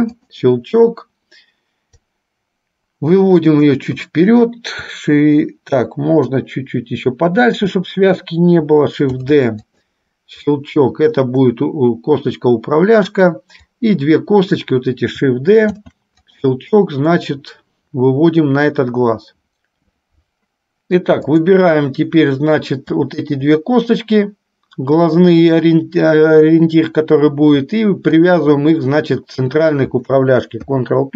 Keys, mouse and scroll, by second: 2.1-3.7 drag, 6.5-7.5 drag, 9.2 shift+d, 10.6-13.2 drag, 13.9 click, 15.9 shift+d, 17.4-19.4 drag, 21.4 click, 23.2-24.2 shift+drag, 28.2-29.2 shift+drag, 30.7 ctrl+p.